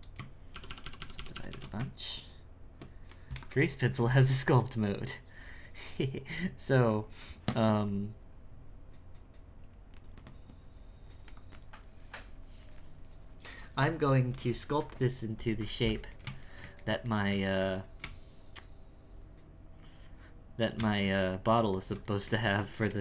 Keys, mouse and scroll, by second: 0.5-1.3 shift+r, 1.5 shift+r, 1.7 Tab, 16.2-18.0 ctrl+shift+middle drag, 18.0 space, 21.2-23.0 ctrl+middle drag.